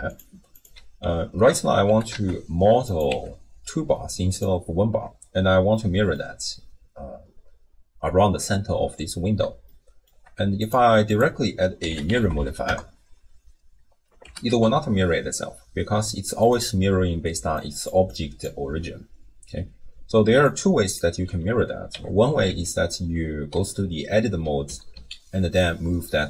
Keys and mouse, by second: 0.5 click, 1.0 Tab, 1.5 1, 1.9 g, 3.1 Tab, 4.3 click, 5.7-6.2 drag, 9.8 shift+middle click, 11.2-12.7 drag, 12.2 r, 14.3 g, 17.3-18.6 d, 17.6 click, 18.8 d, 20.3-21.3 d, 20.4 click, 21.9 Tab, 22.5 a, 24.7 g.